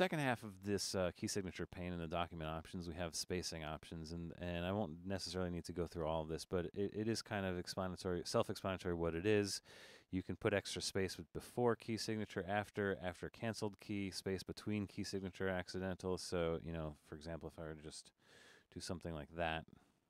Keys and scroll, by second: 17.9-18.8 typing.